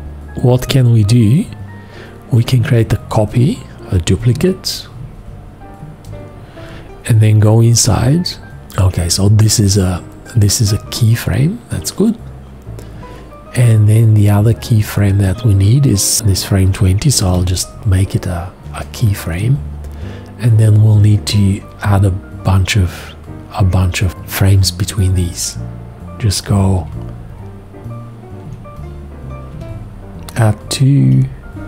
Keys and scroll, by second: 4.1 ctrl+e, 8.0 F2, 17.2 alt+x, 26.8 z, 28.5 z, 31.0 z.